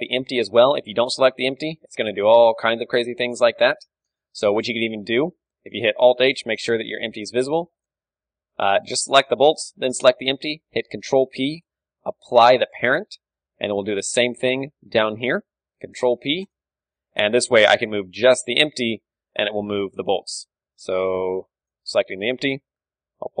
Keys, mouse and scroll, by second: 0.0 a, 0.2-2.6 right drag, 1.4 g, 3.2-5.8 right drag, 3.7 alt+h, 5.8 alt+h, 6.2-8.4 right drag, 7.1 z, 7.5 z, 8.4-9.8 middle drag, 9.8-12.0 right drag, 11.5 ctrl+p, 12.2 KP_1, 13.3-14.6 middle drag, 13.3 a, 14.6-16.0 drag, 16.0 ctrl+p, 16.0-17.3 right drag, 17.3 KP_1, 17.8 a, 18.6 right click, 18.6 g, 19.5-23.4 middle drag, 20.0 a, 22.5 KP_1, 23.1 g.